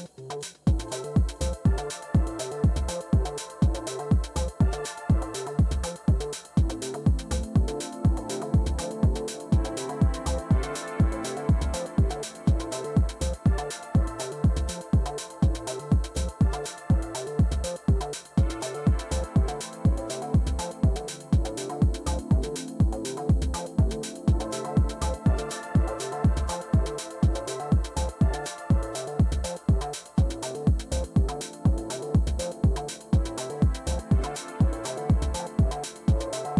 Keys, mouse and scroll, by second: 0.0-4.2 typing, 6.1 Return, 12.5 scroll down 1, 13.3-13.6 scroll down 2, 14.0-14.4 scroll down 2, 14.4 scroll up 2, 14.9-15.9 drag, 15.7-17.8 typing, 18.0 Return, 20.6 click, 21.6 click, 21.6 right click, 24.3-25.3 drag, 27.9-29.1 typing, 29.6 Return, 31.3 typing, 31.6 right click, 34.6-35.9 drag, 36.4-36.5 drag.